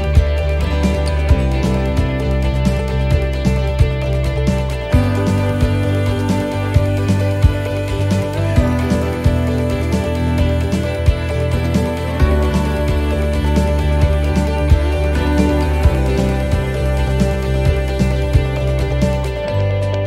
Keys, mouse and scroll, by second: 0.2 l, 2.9 l, 2.9 l, 4.6 x, 9.0 l, 9.1 l, 10.7 l, 11.0 l, 11.3 l, 11.5 l, 12.8 l, 13.7 l, 15.7-18.7 typing.